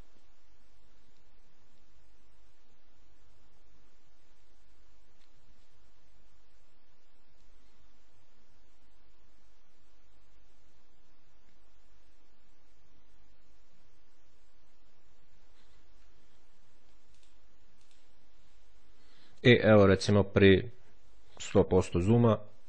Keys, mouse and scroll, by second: 17.0 click, 20.1-20.6 scroll up 2, 21.2-21.8 scroll down 2.